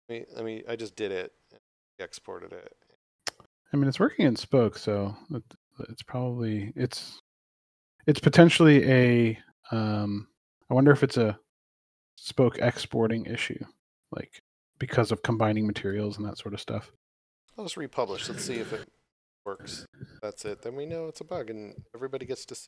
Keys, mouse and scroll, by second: 3.7 click, 9.4 click, 16.0 click.